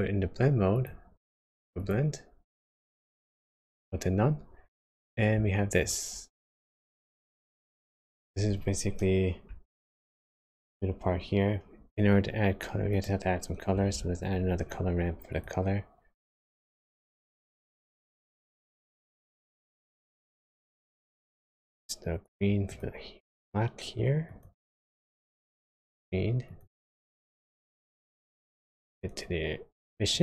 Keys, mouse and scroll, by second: 0.7 click, 2.9 click, 7.1-7.7 scroll up 2, 7.7-8.4 scroll down 1, 8.4 scroll down 1, 9.0-9.5 scroll down 3, 9.7 shift+middle click, 11.3 scroll up 2, 11.7-12.2 scroll down 1, 12.9 click, 13.9 shift+a, 22.7 click, 28.9 click.